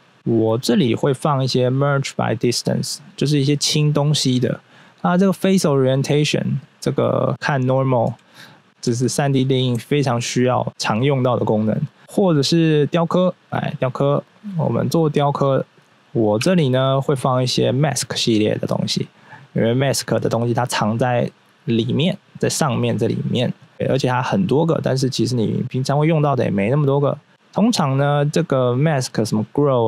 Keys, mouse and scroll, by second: 0.1 q, 5.2 click, 5.9 scroll down 1, 6.2 middle click, 7.0 middle click, 7.3-8.0 scroll up 1, 8.0 q, 8.4 click, 8.8 Tab, 9.1 scroll up 1, 9.7-10.2 scroll up 1, 10.2 scroll down 1, 13.1 click, 14.0 click, 14.7 scroll up 1, 16.4 q, 21.0 click, 22.4 click.